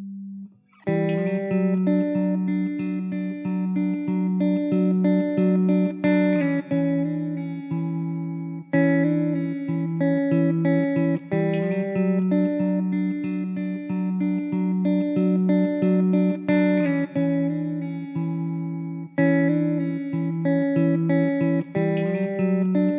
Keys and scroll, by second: 0.0 e, 1.0 Tab, 2.1 Tab, 3.5 s, 4.8 ctrl+r, 6.2 s, 10.7 alt+z, 11.3 s, 13.9 s, 18.3 s, 19.9 s, 21.8 Tab, 22.2 s.